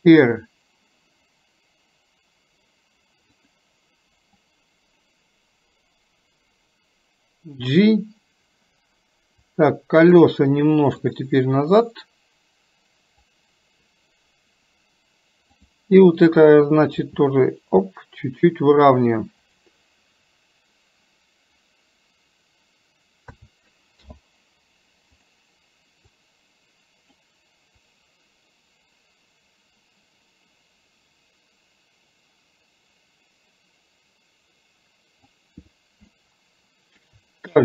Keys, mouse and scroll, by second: 4.5-7.8 drag, 9.5 click, 11.1 click, 12.0-13.4 drag, 26.3-27.1 drag, 28.0-35.5 drag, 36.2-37.0 shift+middle drag.